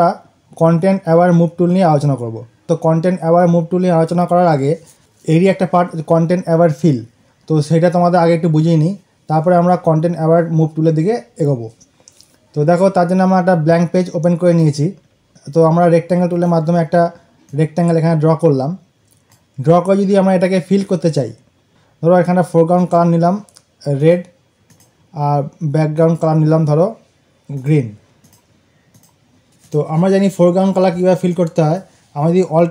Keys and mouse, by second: 14.4 click, 15.2 ctrl+d, 16.2 right click, 17.4-21.5 drag, 21.6 click.